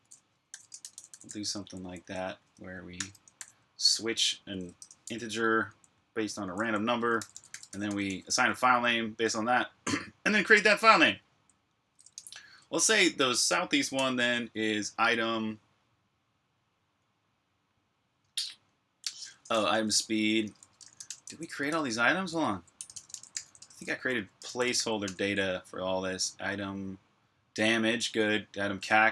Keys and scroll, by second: 0.0-4.4 typing, 5.5-8.9 typing, 10.9-13.8 typing, 19.3-25.4 typing.